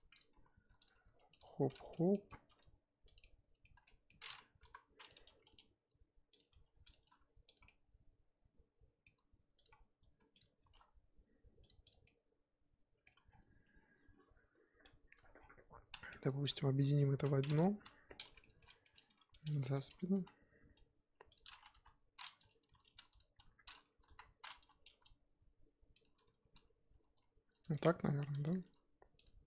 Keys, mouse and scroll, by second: 0.2 click, 0.3 r, 0.9 g, 1.7-2.4 middle drag, 2.4 r, 3.2-4.6 middle drag, 4.6 KP_7, 5.2 r, 7.6-9.6 middle drag, 9.6 click, 9.7-10.4 scroll down 2, 10.4 click, 10.6 g, 11.8 click, 12.0-13.2 middle drag, 13.2-13.7 scroll down 3, 13.7-14.8 scroll up 2, 15.2 click, 15.3 scroll down 4, 15.5-16.3 scroll up 2, 16.3 shift+click, 17.1 ctrl+j, 17.4 scroll down 4, 17.7 KP_1, 18.0-18.4 scroll down 3, 18.4 shift+middle click, 18.7-19.1 scroll up 1, 19.1 g, 19.7-20.1 shift+scroll up 4, 19.7 shift+middle drag, 20.1 s, 21.7 KP_3, 22.6 g, 24.1 KP_1, 24.9 r, 26.9 r, 27.7 g, 28.6 r.